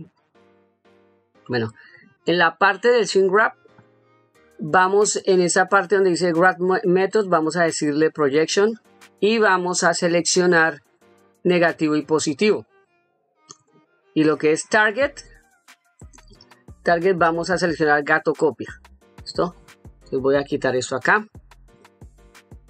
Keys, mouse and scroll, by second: 0.0 click, 1.3 middle click, 2.4 middle click, 6.8-8.2 drag, 10.1 click, 11.6 click, 12.8 click, 15.8-18.0 drag, 20.0-22.0 drag.